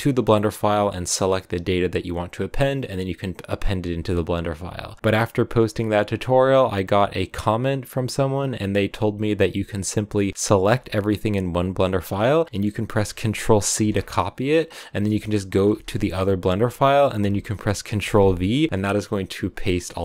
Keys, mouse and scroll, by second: 17.4-20.0 scroll down 2.